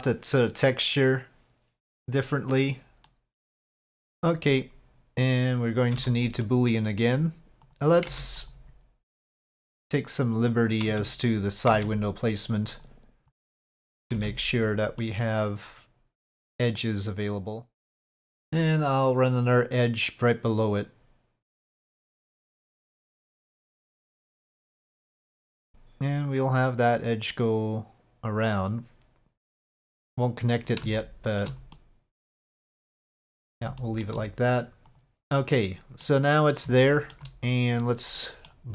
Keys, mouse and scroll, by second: 2.0-2.7 middle drag, 2.9-3.3 shift+middle drag, 4.0 middle drag, 6.0 Tab, 6.4 middle click, 8.1 Tab, 8.4 click, 9.7-10.9 drag, 10.9 Tab, 11.7 Tab, 12.8 click, 13.3 click, 14.1 Tab, 15.0 middle click, 15.8 click, 16.0-17.6 middle drag, 17.1 Tab, 19.1 click, 20.7-23.2 drag, 23.6-25.1 middle drag, 26.7-30.7 drag, 31.0 shift+middle click, 31.8 middle click, 33.0 middle click, 33.9 shift+middle click, 34.9 middle click, 35.4 middle click, 36.9 shift+middle click, 38.1 middle click.